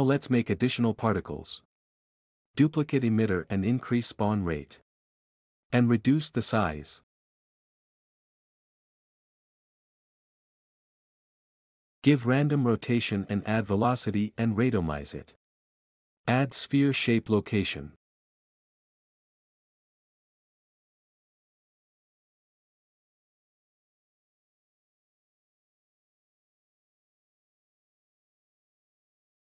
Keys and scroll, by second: 0.3 ctrl+c, 0.5 ctrl+v, 3.7-4.7 typing, 9.1-10.1 typing, 14.4-15.3 typing, 17.3-21.5 typing, 25.5 typing.